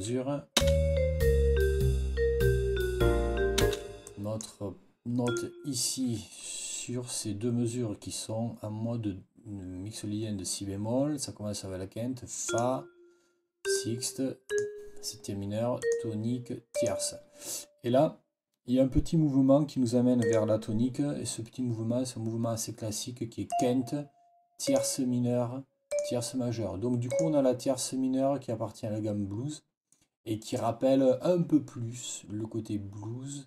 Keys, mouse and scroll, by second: 0.5 space, 3.5 space, 3.9 click, 5.1 click, 12.3 click, 13.5 click, 14.4 click, 15.7 click, 16.6 click, 20.1 click, 23.4 click, 24.5 click, 25.8 click, 27.0 click.